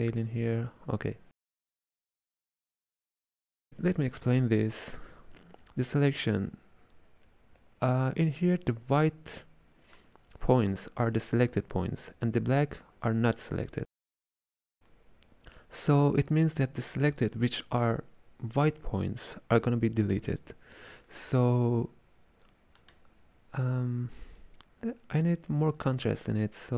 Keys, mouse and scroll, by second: 2.3-3.6 middle drag, 3.6 click, 4.2 click, 10.0-11.6 middle drag, 11.6 click, 17.2 click, 21.2-24.2 middle drag, 24.5-26.2 shift+drag, 26.2-26.7 middle drag.